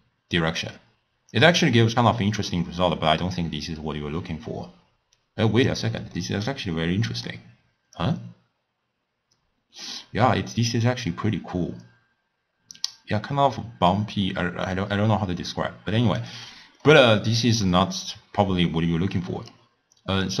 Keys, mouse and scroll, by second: 6.2-8.0 middle drag, 8.0-11.0 drag, 17.7-20.4 middle drag.